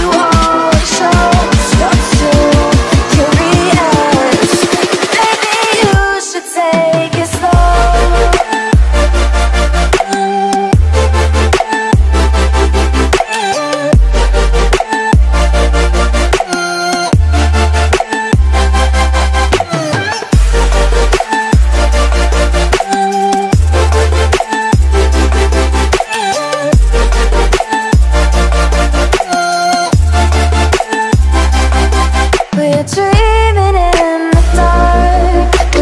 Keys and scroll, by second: 0.7 space, 1.9 ctrl+space, 2.2 ctrl+space, 3.8 space, 4.1 space, 4.6 x, 6.0 x, 7.4 z, 8.6 space, 8.9 x, 10.3 space, 10.7 space, 11.4 space, 12.3 x, 13.3 space, 14.5 ctrl+z, 14.9 ctrl+space, 15.6 ctrl+space, 15.8 ctrl+space, 16.7 z, 17.9 space, 19.6 ctrl+z, 25.7 space, 26.0 x, 26.7 space, 26.9 x, 28.2 space, 29.7 space, 30.2 z, 31.3 ctrl+z, 33.4 space, 35.7 ctrl+z.